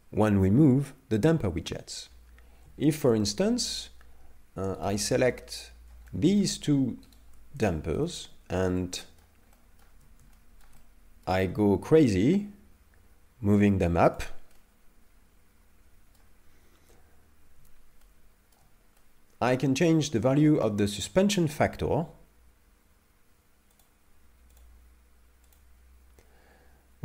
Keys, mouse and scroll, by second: 1.9-2.5 scroll up 2, 2.5-2.9 scroll down 1, 2.9 shift+middle click, 3.2 middle click, 5.0 right click, 5.3 middle click, 6.1 shift+middle click, 7.2 shift+right click, 7.7 shift+middle click, 8.2 middle click, 9.0 shift+middle click, 9.6 shift+middle click, 10.4 shift+middle click, 10.8 middle click, 12.3 g, 14.5 middle click, 18.0 shift+middle click, 19.0 middle click, 20.6 middle click, 23.8 click, 24.6 click, 25.5 click.